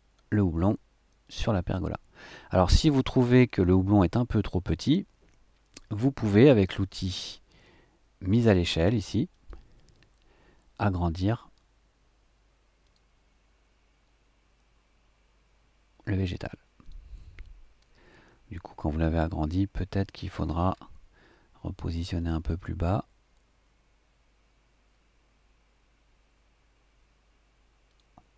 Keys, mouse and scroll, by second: 1.2 click, 3.2-4.1 scroll down 1, 4.1-5.9 middle drag, 9.3 click, 10.9 click, 12.8 click, 16.8 click, 19.4 click, 20.3-22.2 scroll up 1, 22.2 click, 27.9 click.